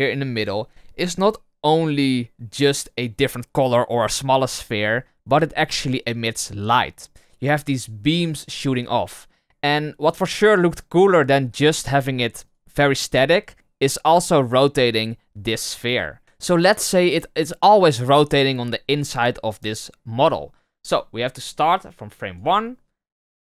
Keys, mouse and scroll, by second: 12.4 right click, 13.0 right click.